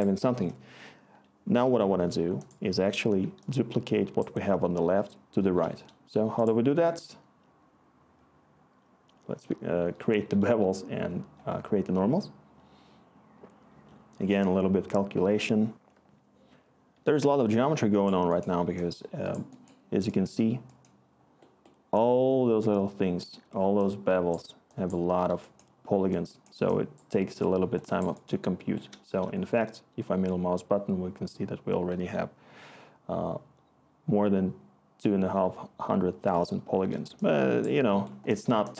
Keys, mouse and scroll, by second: 18.9-20.3 click, 18.9 click, 19.0 click.